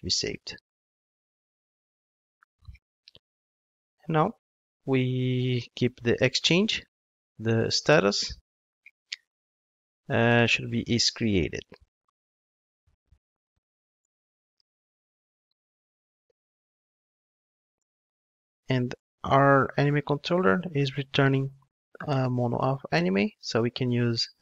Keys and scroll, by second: 1.9 Return, 14.0 Return, 22.6 ctrl+Tab.